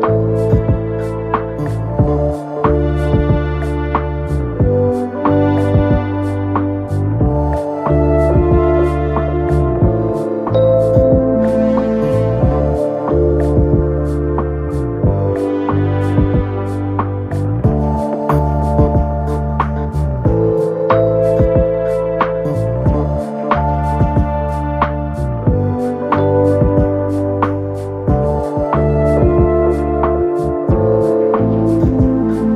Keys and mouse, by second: 0.3 alt+middle click, 0.8 alt+click, 2.8-3.1 alt+drag, 3.5 click, 5.3 alt+x, 5.9 alt+middle drag, 7.0 3, 7.5 alt+click, 8.8 click, 10.5 alt+click, 11.8 click, 12.6 alt+click, 13.3 alt+middle click, 13.5 alt+click, 15.3 alt+click, 16.3-18.7 Up, 19.7 alt+middle click, 20.5 alt+middle click, 21.2 Up, 23.5 middle click, 24.8 alt+middle click, 27.5 F1, 29.5 ctrl+d, 31.7 right click.